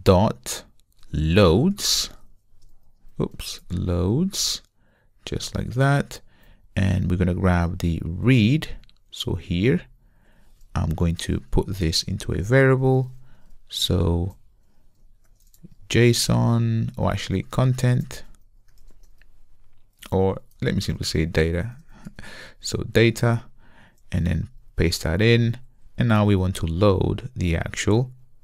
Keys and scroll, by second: 5.2 Return, 6.6 Return, 9.3 super+x, 20.1 alt+BackSpace, 20.6 alt+BackSpace, 24.4 super+v.